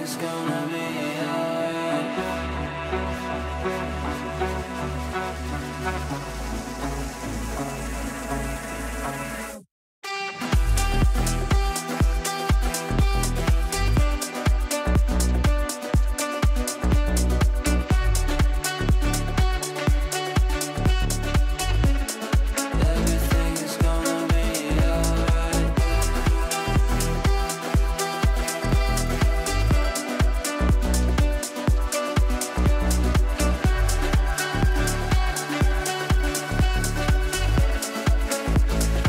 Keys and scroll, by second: 32.0 ctrl+z.